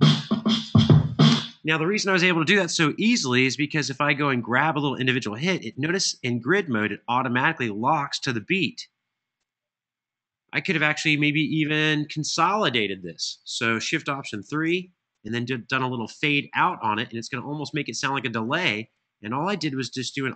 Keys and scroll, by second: 1.0 space, 14.2 alt+shift+3, 16.2 Escape, 17.3 Escape.